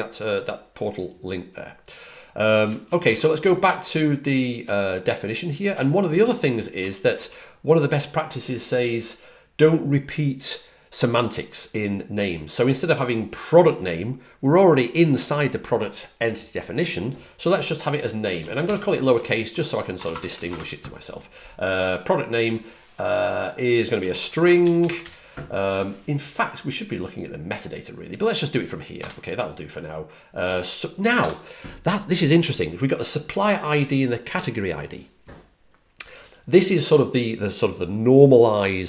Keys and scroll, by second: 6.4-7.6 typing, 17.9-20.0 typing, 24.3-25.4 typing, 28.6-29.4 typing.